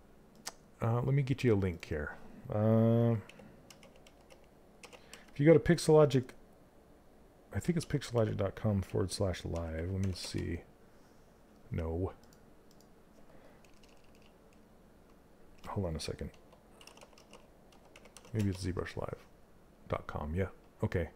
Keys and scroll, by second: 9.0 l, 14.3 BackSpace.